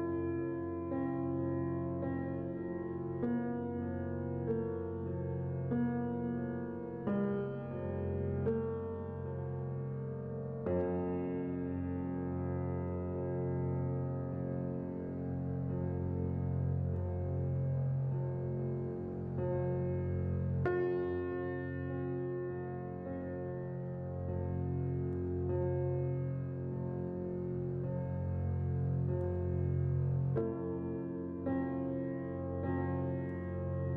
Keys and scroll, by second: 3.0 z, 6.0-6.8 typing, 9.6 c, 13.5 z, 21.0 z, 22.9-23.8 typing, 26.5-27.2 typing, 32.5 z.